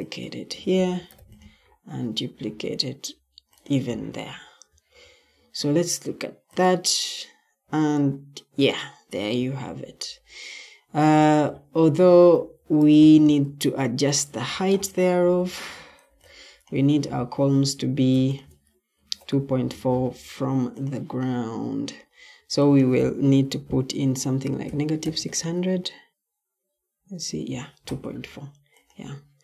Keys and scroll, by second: 0.7 ctrl+d, 4.6 Escape, 12.2 Escape, 17.7 Escape, 18.9 ctrl+t, 24.3-25.6 typing.